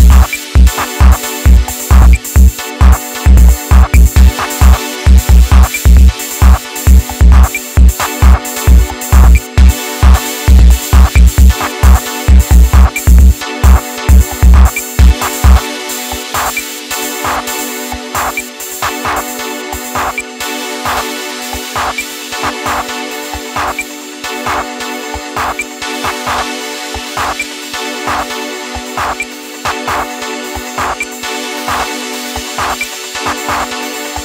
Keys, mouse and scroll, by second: 0.1 KP_1, 2.8-5.0 drag, 6.4 click, 7.2-8.4 middle drag, 8.4 KP_1, 9.3 click, 11.2 click, 12.1-15.2 middle drag, 19.2 middle click, 20.0 scroll up 1, 20.2-21.8 middle drag, 21.8 click, 22.3 alt+z, 22.9-25.9 shift+middle drag, 25.9 ctrl+shift+click, 27.4-29.3 shift+middle drag, 29.3 right click, 29.8 right click, 30.5 x, 33.0 alt+click, 34.1 click.